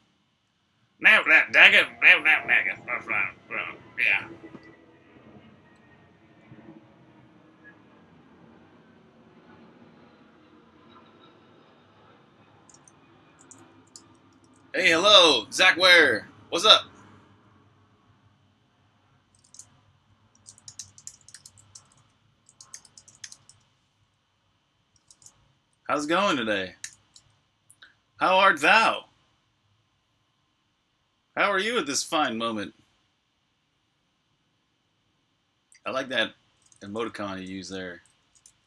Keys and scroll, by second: 13.0-14.2 typing, 20.1-23.8 typing, 26.7 super+r, 26.8-28.0 typing, 36.4-38.6 typing.